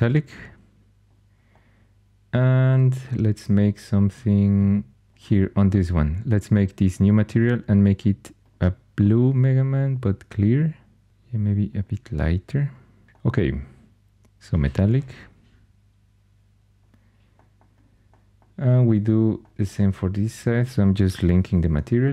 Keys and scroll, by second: 21.1 super+l.